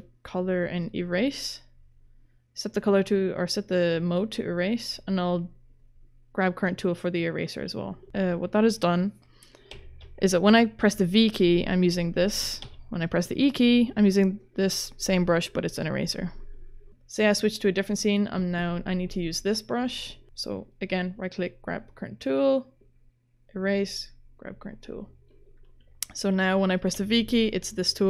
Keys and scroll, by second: 9.7 v, 12.6 e, 27.0 v.